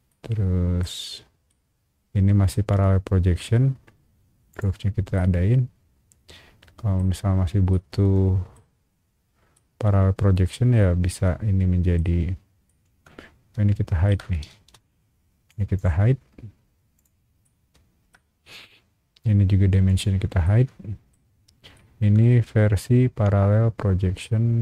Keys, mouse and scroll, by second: 0.1 middle click, 1.5 middle click, 2.7 scroll up 1, 4.5 shift+click, 5.1-7.0 shift+middle drag, 7.1 scroll up 1, 7.7 shift+middle click, 9.5-11.9 shift+middle drag, 12.1 scroll down 1, 12.6-14.0 shift+middle drag, 14.2 scroll down 1, 14.5 space, 14.8 click, 16.9 click, 17.4 shift+middle click, 18.2 scroll up 1, 19.8 shift+click, 20.4 shift+middle click, 21.2 scroll up 1, 21.7-24.2 shift+middle drag.